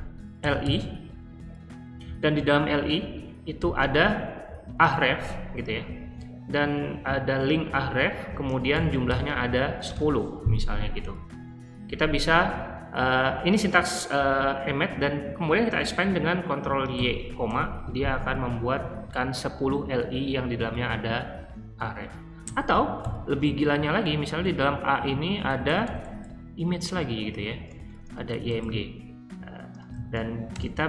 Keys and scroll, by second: 0.0-1.1 typing, 3.5 >, 4.7 a, 8.7-10.3 typing, 12.1 typing, 16.9 ctrl+y, 17.4 ,, 22.4-30.8 typing.